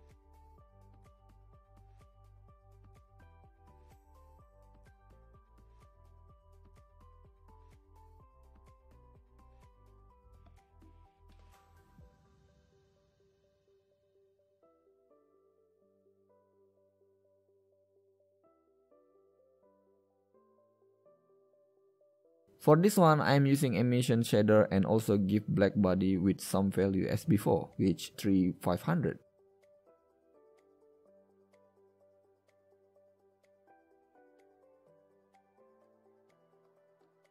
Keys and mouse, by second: 1.6 middle click, 2.0 middle click, 6.5 ctrl+KP_Add, 15.7-16.6 middle drag, 21.0 x, 21.5 shift+a, 26.4 shift+a, 30.0 KP_0, 34.4 Tab, 35.6 Tab.